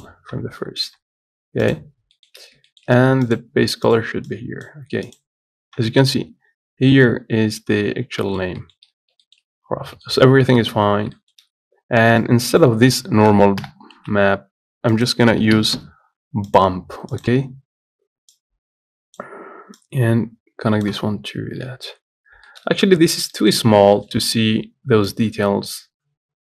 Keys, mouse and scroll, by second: 13.9 Delete, 16.8 shift+a, 18.6-21.7 drag, 21.7-22.1 scroll up 1, 22.1 z, 22.5-23.6 scroll up 2, 22.8 shift+middle click, 23.6 middle click, 23.9-24.2 scroll up 1, 24.2-25.4 shift+middle drag, 25.4-26.5 drag.